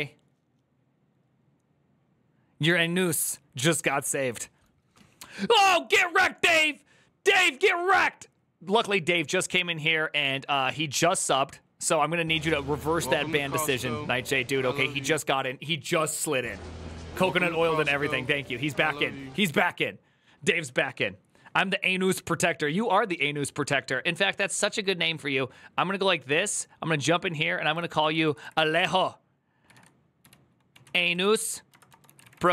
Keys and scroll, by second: 27.5 Left, 28.0 Right, 28.3 Right, 29.5-32.5 typing.